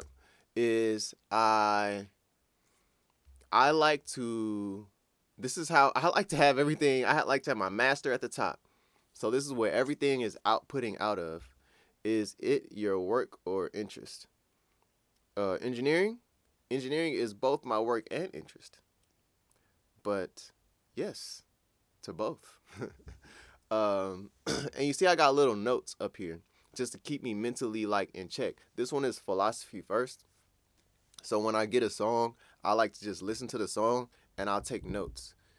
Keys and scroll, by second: 0.0 6.